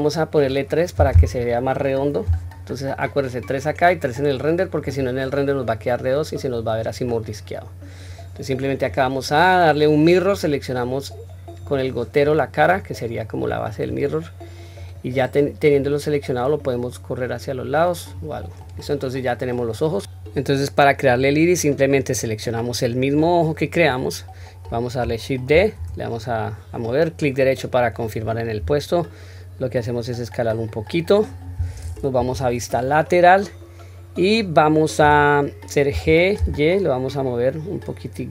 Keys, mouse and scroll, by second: 4.5 click, 5.7 scroll down 1, 6.2 scroll up 1, 8.6-10.2 drag, 11.4 click, 13.2 scroll down 1, 14.5 click, 14.5 scroll down 1, 15.4 click, 16.2 click, 16.5 click, 18.4 click, 21.1 click, 23.9 click, 23.9-25.0 scroll up 2, 25.5 shift+d, 32.2 KP_3, 32.8 scroll up 1, 35.2-35.9 scroll up 2, 35.9 g.